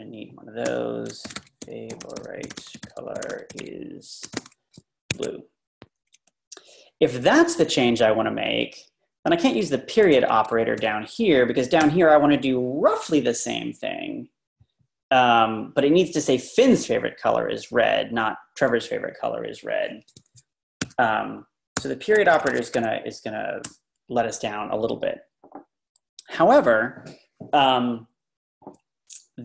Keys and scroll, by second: 0.7-4.3 typing, 5.1 Escape, 8.5-9.7 Left, 9.9 Down, 10.1 Left, 10.3 Left, 10.4 Left, 10.7 Left, 11.9 ., 20.9 u, 22.3 Escape, 22.3-23.2 typing, 23.7 Return.